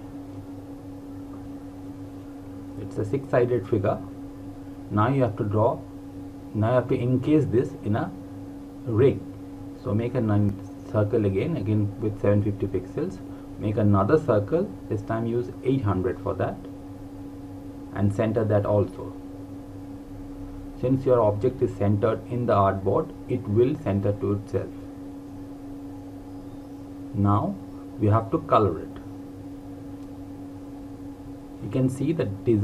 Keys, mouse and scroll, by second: 4.1 l, 5.6 click, 13.4 click, 16.3 KP_5, 17.5 BackSpace, 18.1 KP_8, 18.5 KP_0, 19.7 click, 32.2 click.